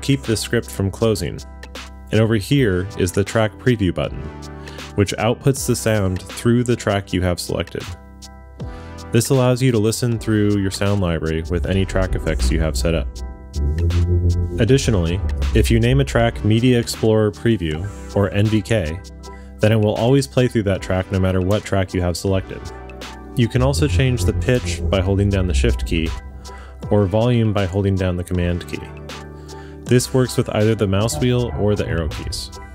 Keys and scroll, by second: 13.3 Down, 18.3 space, 19.6-20.5 typing, 26.0 shift+super+Up, 28.4 shift+Down, 29.3 shift+Up, 29.8 super+Down, 30.4 super+Up.